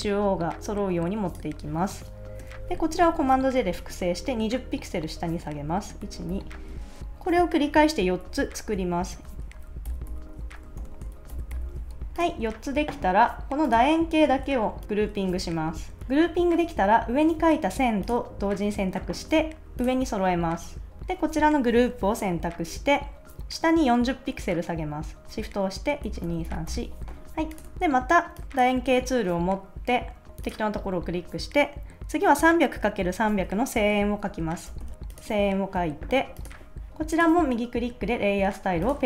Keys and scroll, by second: 3.2 super+j, 6.0 shift+Down, 9.1 super+j, 9.9 shift+Down, 10.8 super+j, 11.3 shift+Down, 15.3 super+g, 15.8 super+s, 26.0 shift+Down, 27.7 super+s, 34.4-35.4 typing.